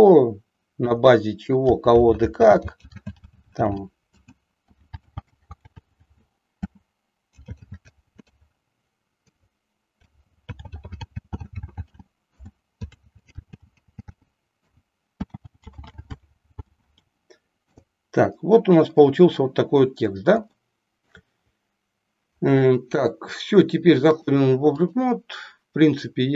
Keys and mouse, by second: 0.9 Return, 2.1-8.3 typing, 9.3 Return, 10.9-15.3 typing, 16.4 s, 17.0 s, 17.6 Return, 20.5 shift+middle click, 24.1 click.